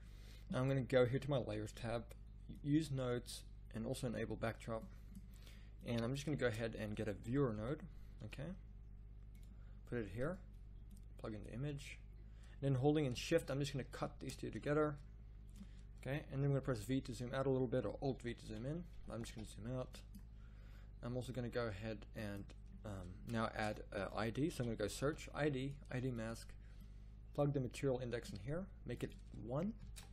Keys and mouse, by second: 9.4 shift+a.